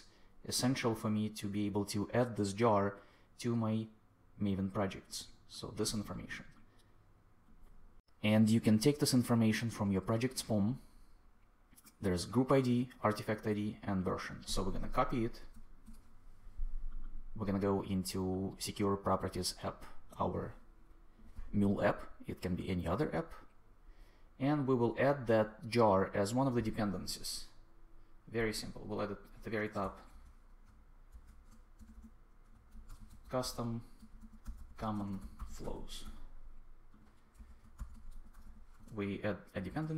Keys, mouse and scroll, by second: 15.5 super+c, 29.7 Return, 30.0 Tab, 30.6 shift+Tab, 31.1-36.0 typing, 37.3 Return, 37.5-38.8 typing, 39.4 ctrl+Return.